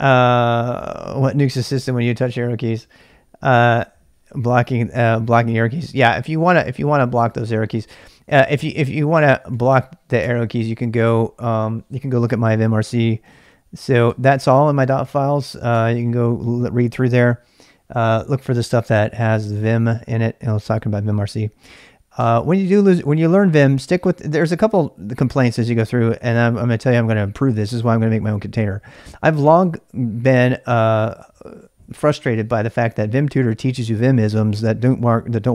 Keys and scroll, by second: 8.5-10.0 typing, 10.2 Return, 13.0-16.0 typing.